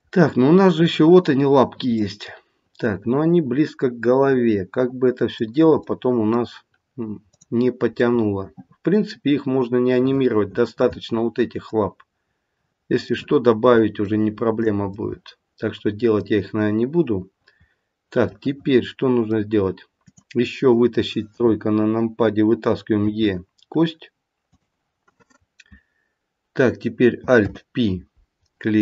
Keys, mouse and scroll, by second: 1.9 middle click, 2.1 middle click, 2.2 middle click, 3.1 middle click, 7.3 click, 8.0 middle click, 11.7 middle click, 12.3 middle click, 12.6 middle click, 14.0 shift+middle click, 14.9 middle click, 18.2 middle click, 19.9 click, 21.2 KP_3, 23.0 e, 25.1 click, 27.4 alt+p.